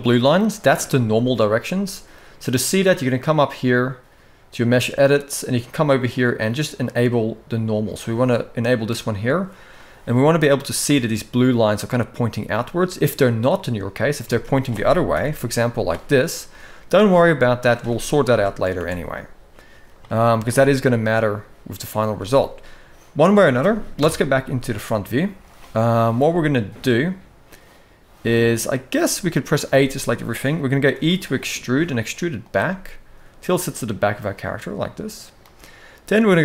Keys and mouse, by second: 0.8 middle click, 2.9-9.2 drag, 9.5 middle click, 11.4 middle click, 12.3 middle click, 13.3 middle click, 13.9 a, 14.9 alt+n, 16.3 middle click, 16.9 middle click, 18.0 ctrl+z, 18.5 alt+a, 18.9 middle click, 19.8 shift+middle click, 20.2-21.7 middle drag, 21.9 shift+middle click, 23.7 KP_1, 24.7 shift+middle click, 26.0 shift+middle click, 28.8 middle click, 29.4 a, 30.7 e, 32.4-35.1 middle drag.